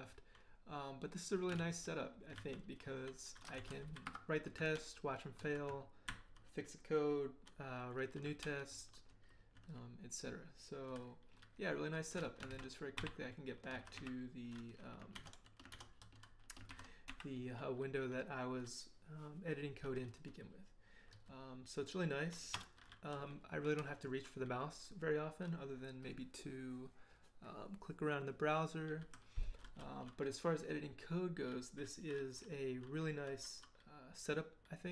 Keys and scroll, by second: 1.6 ctrl+l, 2.3 ctrl+h, 2.7 ctrl+j, 2.9 ctrl+j, 3.3-4.4 typing, 4.7 ctrl+l, 6.1 ctrl+h, 8.4 ctrl+l, 12.5 ctrl+b, 13.0 ctrl+n, 13.8 ctrl+b, 13.9 ctrl+n, 15.1 ctrl+d, 15.7 ctrl+d, 16.7 ctrl+b, 17.1 ctrl+n, 21.1 d, 22.5 BackSpace.